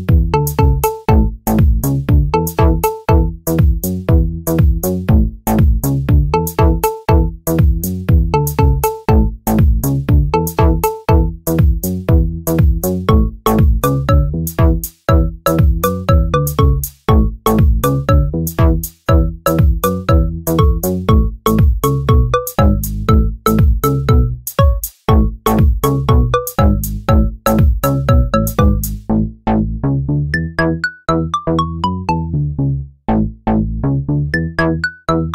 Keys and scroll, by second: 19.7 Return.